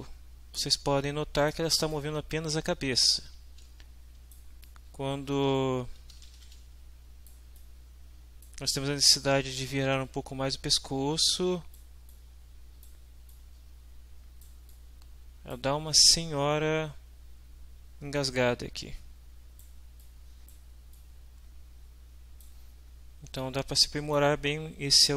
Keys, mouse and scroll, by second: 0.6 w, 0.9-1.3 right drag, 1.4 right click, 1.9-4.5 right drag, 3.3 s, 4.7-7.5 right drag, 5.3-6.9 typing, 7.5-8.6 right drag, 9.0-11.9 right drag, 12.1-13.1 right drag, 13.3 right click, 14.3 middle click, 14.7 middle drag, 14.8 right click, 15.0 middle click, 15.0 right click, 15.4 middle click, 15.5 right click, 16.0-19.2 right drag, 19.2 middle drag, 19.3 right click, 19.4 middle click, 19.5 right click, 19.5 middle click, 20.0 middle click, 20.1 right click, 20.2 middle click, 20.3 right click, 20.4 middle click, 20.5 right click, 20.9-22.6 right drag, 23.3-24.3 right drag.